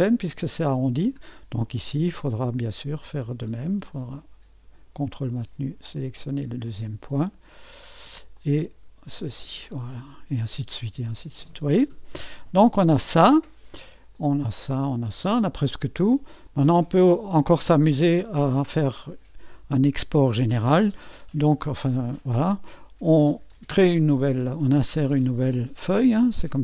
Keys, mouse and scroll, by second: 0.8-3.1 scroll down 1, 3.1 click, 6.0 click, 8.3 click, 9.9-12.1 drag, 14.1 click, 14.9-15.9 drag, 16.4 click, 17.0 click, 20.6-23.5 scroll up 2, 23.5-26.6 drag.